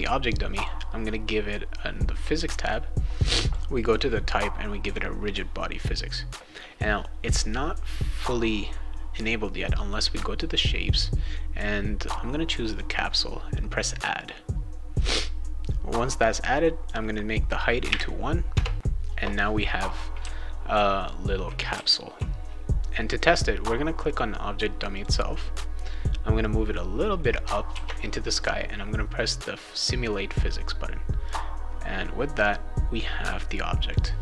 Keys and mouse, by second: 0.6 click, 3.4 click, 4.8 click, 10.9 click, 12.7 click, 14.2 click, 16.5 click, 19.4-22.1 right drag, 20.2 w, 21.7 s, 23.2 click, 24.0 click, 24.9 click, 26.4 click, 27.7 ctrl+s, 31.2 click, 33.8 click.